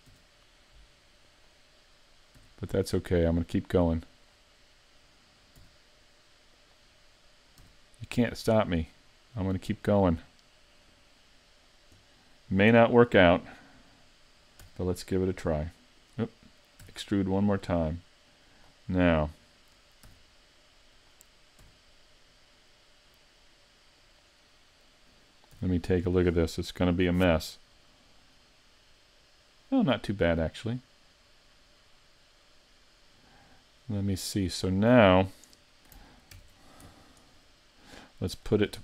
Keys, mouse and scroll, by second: 1.4 click, 6.7 r, 9.7 click, 10.1 r, 16.1 right click, 16.1 r, 18.7 e, 21.6 g, 23.6 g, 24.1 click, 24.1 r, 25.1 r, 28.4 middle click, 28.4 z, 36.3 ctrl+alt+q, 37.3-37.8 scroll down 3, 37.8 middle click, 38.5-38.8 scroll down 1.